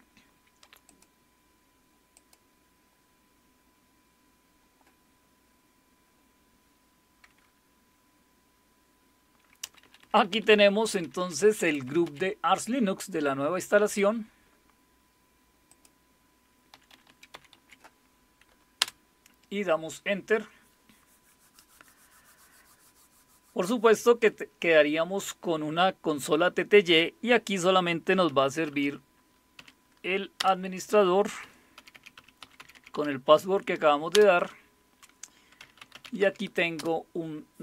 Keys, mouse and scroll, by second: 0.8 click, 2.1 click, 9.6 Down, 9.8-10.2 typing, 10.4 Up, 10.6 Up, 11.0 Down, 11.2 Down, 11.4 Down, 11.6 Up, 11.9 Up, 12.0 Up, 13.9 click, 15.7 click, 15.7 typing, 16.8-17.5 typing, 18.8 typing, 28.0-29.6 typing, 30.4 Return, 31.4-33.4 typing, 34.1 Return, 35.4-37.3 typing.